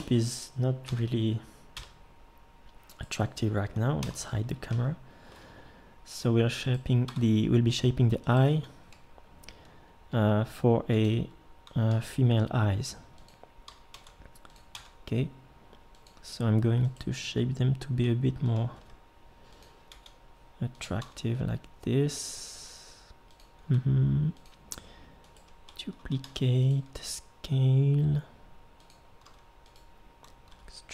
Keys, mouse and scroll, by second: 0.0 Escape, 0.9 KP_1, 1.8 KP_7, 4.0 h, 7.1 Tab, 10.1 g, 11.9 e, 13.9 r, 14.7 s, 18.7 g, 19.9 r, 21.0 e, 23.6 s, 26.2 shift+d, 26.9 s, 29.2 g, 30.5 e.